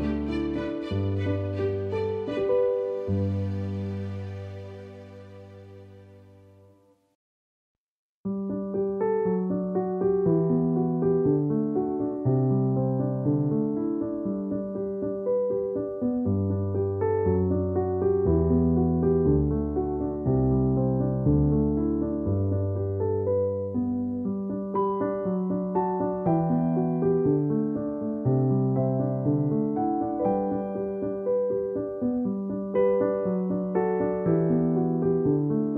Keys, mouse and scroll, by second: 0.9 alt+y, 2.6 click, 7.5 space, 7.6 click, 7.8 space, 8.2 b, 9.2 click, 10.9-12.6 typing, 14.7 typing, 16.8 [, 18.4 [, 19.5-20.2 typing, 22.2 click, 22.8 ctrl+-, 25.7 b, 28.1 click, 28.9 alt+click, 29.4 ctrl+=, 31.4 click.